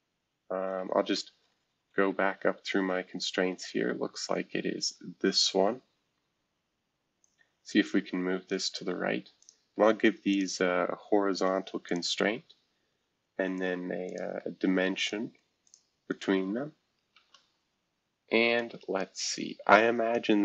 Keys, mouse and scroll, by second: 0.2 Up, 0.6 Up, 1.6 Up, 3.3-5.3 Up, 7.2-8.5 drag, 9.4 click, 10.3 ctrl+click, 11.8 click, 14.0 click, 15.0 ctrl+click, 15.6 ctrl+click, 16.1 ctrl+click, 17.1 shift+h, 18.5 click.